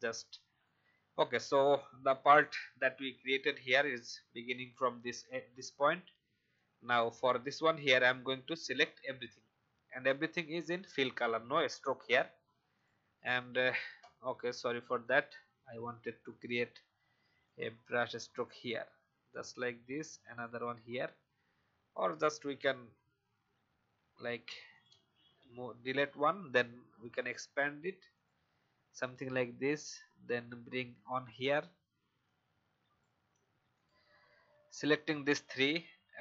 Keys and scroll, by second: 21.5 v, 21.9 v, 24.1 v, 25.2 Delete.